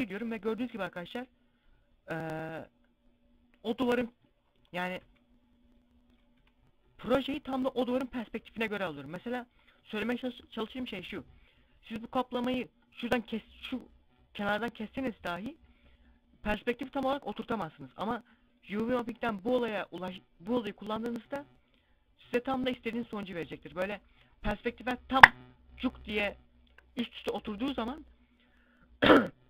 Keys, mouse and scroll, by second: 3.0 s, 3.6 click, 3.8 scroll down 1, 4.4 s, 5.6 click.